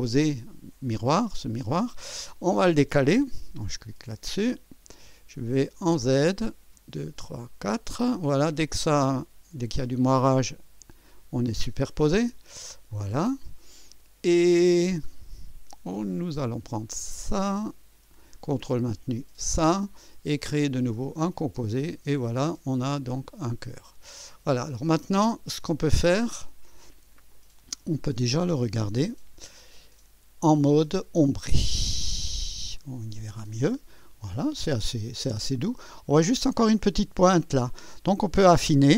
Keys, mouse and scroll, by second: 3.8 click, 4.3 click, 5.8 click, 6.4-7.5 scroll up 5, 8.5 click, 10.8 click, 11.6 click, 12.3 click, 12.9-15.3 drag, 16.4 click, 17.6 click, 19.2 ctrl+click, 20.9 click, 21.8 click, 22.9 click, 23.4 click, 24.2 click, 26.4 click, 27.3 click, 28.3 right click, 29.0 click, 31.2 click, 32.4 click, 33.5-36.4 drag, 37.2-38.9 drag.